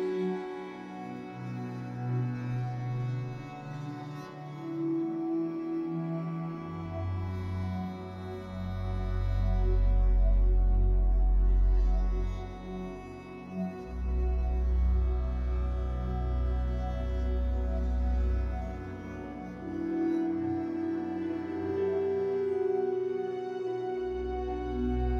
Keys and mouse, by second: 1.5 click, 2.9 ctrl+z, 3.0 ctrl+z, 3.6 click, 4.4 g, 9.5 click, 10.5 3, 10.7 click, 11.9 shift+click, 12.3 click, 13.6 click, 14.2 1, 14.4 click, 14.6 g, 17.0 click, 17.2 g, 18.4 Tab, 18.6 Tab, 19.7 ctrl+z, 19.8 ctrl+z, 19.9 ctrl+z, 21.5 click, 22.7 ctrl+z, 22.9 g, 24.2 click, 24.4 g.